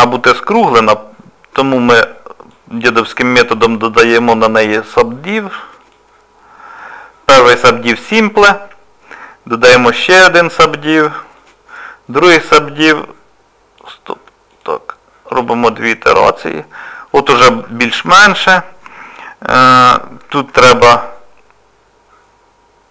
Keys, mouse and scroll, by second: 1.7 click, 3.8 click, 7.6 click, 9.7 click, 13.8 click, 14.5 click, 17.1 middle click, 20.8 shift+r.